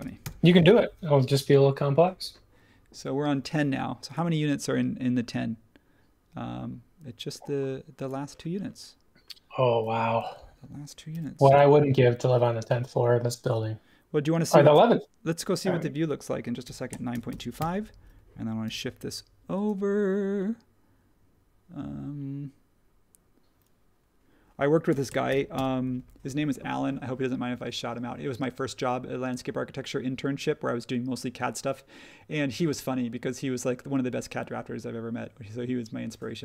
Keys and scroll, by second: 0.0-1.3 typing, 1.3 super+1, 10.2 super+z, 11.1 m, 16.4-18.6 typing, 24.6-25.8 typing.